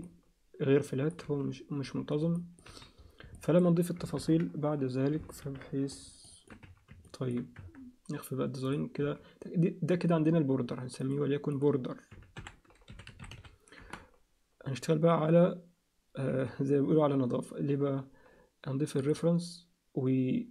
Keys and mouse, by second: 0.0-1.1 alt+middle drag, 1.3 z, 1.8 z, 2.3 middle click, 2.7 z, 3.3 alt+middle click, 4.2 ctrl+KP_3, 5.4 ctrl+KP_1, 6.2 alt+shift+middle click, 6.6 z, 7.0 ctrl+alt+middle click, 7.6 Tab, 8.6 click, 9.0 z, 11.0 click, 11.6-14.0 drag, 16.3 z, 19.0 click.